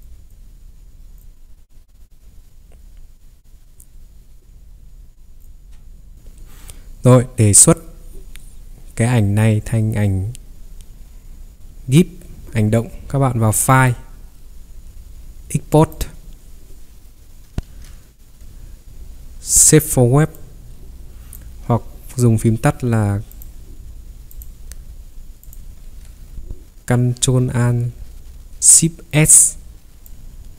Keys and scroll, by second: 17.6 ctrl+3, 25.9 ctrl+3.